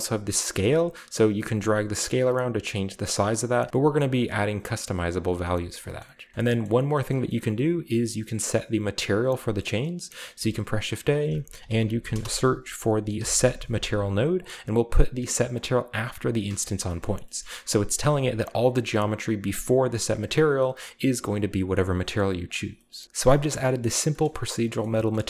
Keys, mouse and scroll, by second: 0.7-3.5 shift+drag, 3.5 shift+middle click, 3.7-5.2 scroll up 1, 4.1-5.2 shift+drag, 5.2-6.5 shift+middle drag, 5.8-6.5 scroll down 1, 6.2 a, 6.5-9.5 shift+scroll up 2, 6.6 shift+middle click, 7.1 middle click, 7.4-8.0 middle drag, 9.7 middle click, 10.3 typing, 11.1 click, 11.6-12.1 typing, 13.1 typing, 14.3 click, 15.4 drag, 15.9 click, 16.8 shift+click, 17.0 shift+middle click, 17.0-18.0 shift+scroll up 1, 17.5-18.0 middle drag, 18.0 click, 19.4 click, 20.1 click, 21.3 click, 22.0 click, 22.4 click, 22.7 shift+middle drag, 22.9 shift+click, 23.0 typing, 23.8 middle click, 23.9-24.7 scroll down 1, 24.2 shift+middle drag, 24.8 middle drag, 25.1 shift+middle drag.